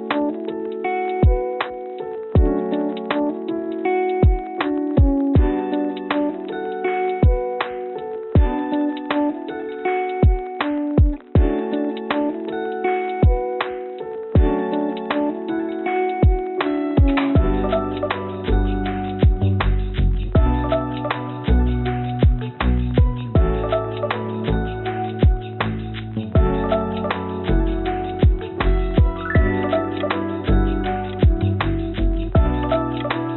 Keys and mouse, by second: 1.2 click, 1.9 click, 3.4 click, 9.4-14.5 drag, 16.5 click, 17.9 Tab, 19.0 Tab, 19.9 Tab, 21.0 click, 22.1 Tab, 23.4 click, 23.6 Tab, 29.4 ctrl+r.